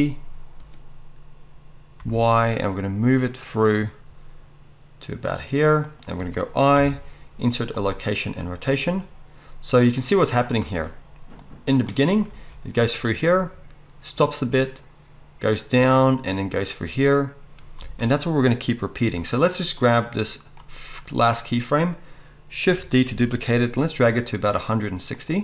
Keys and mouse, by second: 6.0-9.9 middle drag, 6.7 i, 9.9-25.2 drag, 12.3 space, 17.8 space, 23.1 shift+d, 25.2 middle click.